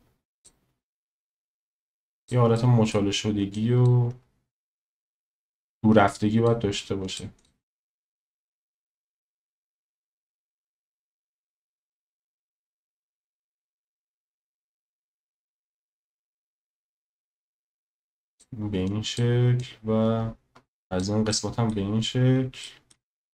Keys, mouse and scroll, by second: 2.6 middle click, 5.6 click, 7.0 click, 7.4 click, 7.8 click, 10.6 s, 11.6 click, 12.7-13.9 middle drag, 14.4 shift+middle click, 16.7 click, 18.9 click, 19.6 click, 21.3-21.7 middle drag, 22.6 shift+middle drag.